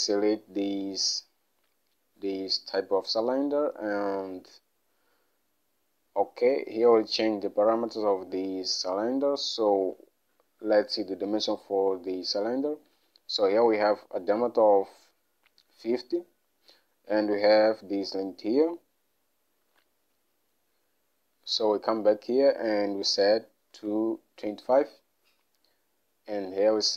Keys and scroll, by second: 23.7 typing.